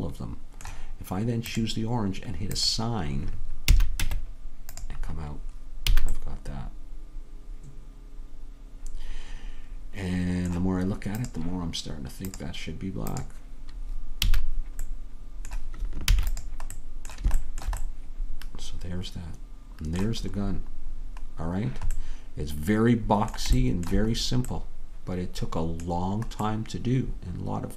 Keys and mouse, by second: 1.5 click, 3.8 a, 4.1 Tab, 6.0 a, 11.6-14.4 drag, 14.4 a, 16.2 ctrl+s, 22.9-27.7 middle drag.